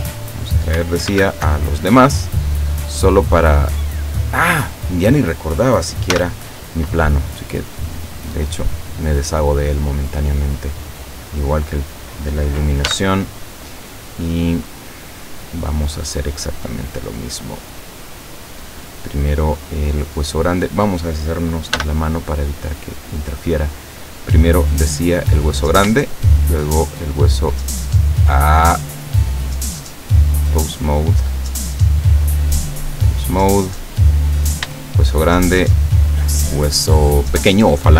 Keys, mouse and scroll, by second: 0.2 click, 1.1 alt+h, 1.7-2.3 alt+scroll down 3, 2.6-3.9 middle drag, 4.1 right click, 4.7 right click, 6.2 h, 8.4-11.5 middle drag, 11.7 right click, 12.9 h, 13.5-17.4 middle drag, 18.8 right click, 19.5-20.0 scroll up 1, 20.5 right click, 21.8 h, 22.8 middle click, 24.1-25.1 middle drag, 25.5 right click, 26.4 shift+right click, 28.2 right click, 29.9 click, 30.6 click, 31.4 right click, 32.4 click, 33.1 click, 34.0 right click, 35.6 shift+right click.